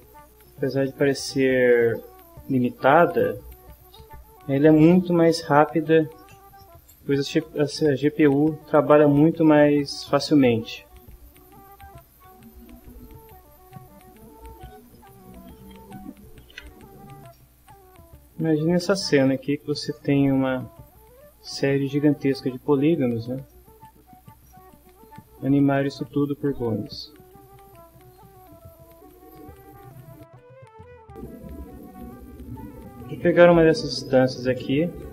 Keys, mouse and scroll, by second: 0.3 click, 0.5-1.3 typing, 1.4 Return, 2.2 click, 2.6 click, 2.9 click, 3.3 middle click, 4.0 click, 4.6 middle click, 5.6 click, 6.3 click, 6.5 ctrl+middle click, 7.3 click, 7.7 shift+middle click, 8.2 ctrl+d, 8.5 click, 9.3 click, 10.1 ctrl+d, 10.3 ctrl+click, 10.7 ctrl+d, 10.8 ctrl+click, 11.4 ctrl+d, 11.5 ctrl+click, 12.0 ctrl+d, 12.1 ctrl+click, 12.5 ctrl+d, 12.7 ctrl+click, 13.3 shift+middle click, 13.5 ctrl+shift+d, 13.7 ctrl+shift+click, 14.7 shift+middle click, 14.9 shift+middle click, 15.4 click, 15.9 ctrl+middle click, 16.3 click, 16.7 ctrl+f, 17.1 ctrl+shift+middle click, 17.6 ctrl+shift+d, 17.9 click, 18.5 ctrl+d, 18.7 ctrl+click, 19.2 ctrl+d, 19.3 ctrl+click, 19.8 ctrl+d, 20.1 click, 20.5 ctrl+d, 20.7 ctrl+click, 21.2 ctrl+d, 21.3 ctrl+click, 21.8 shift+middle click, 22.1 ctrl+shift+d, 22.3 click, 23.0 ctrl+middle click, 23.4 shift+middle click, 23.7 ctrl+shift+middle click, 24.2 click, 24.5 click, 25.3 click, 26.3 ctrl+middle click, 26.7 ctrl+middle click, 27.2 ctrl+middle click, 28.4 click, 29.1 click, 30.1 shift+middle click, 34.9 click.